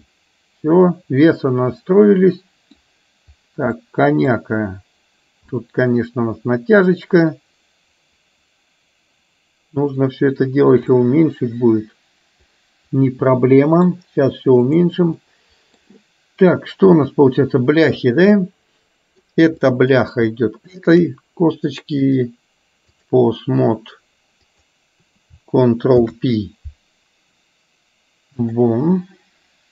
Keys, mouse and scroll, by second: 3.9 middle click, 5.7-10.2 middle drag, 11.1-13.9 middle drag, 14.7 click, 15.2 middle click, 18.4 middle click, 19.7 middle click, 20.8 shift+click, 22.2-23.2 drag, 24.4 click, 25.9 ctrl+p.